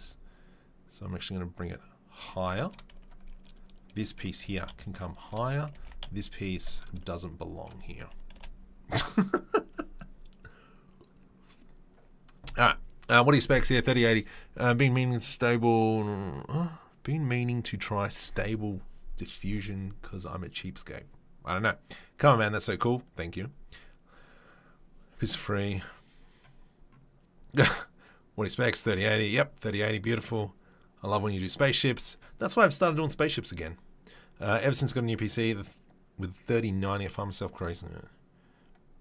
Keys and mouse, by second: 4.4 g, 5.7 g, 8.4 Delete.